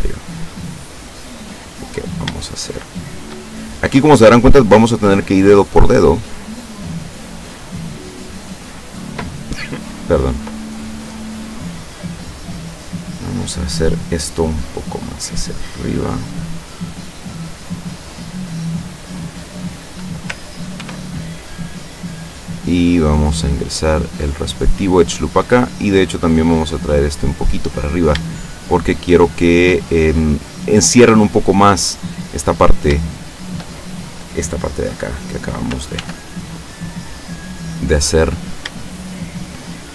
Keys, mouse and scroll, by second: 1.3 click, 2.0 right click, 2.6 shift+right click, 3.1 shift+right click, 3.5 shift+middle click, 4.5 scroll up 2, 5.3-7.7 drag, 7.7 scroll up 2, 7.8 scroll down 2, 8.1 scroll up 2, 8.3-9.4 middle drag, 10.3-12.6 middle drag, 13.1 right click, 14.5-16.3 drag, 16.3-17.6 middle drag, 17.7-20.0 middle drag, 20.9 ctrl+r, 22.8 click, 24.5 click, 25.4 right click, 26.5-27.7 drag, 27.9 shift+right click, 28.5 shift+right click, 29.4 shift+right click, 30.4-32.2 drag, 32.3 middle click, 33.2 shift+middle click, 36.0 ctrl+r, 36.5 ctrl+click, 37.6 click, 38.2 right click, 38.9 shift+right click, 39.8 shift+right click.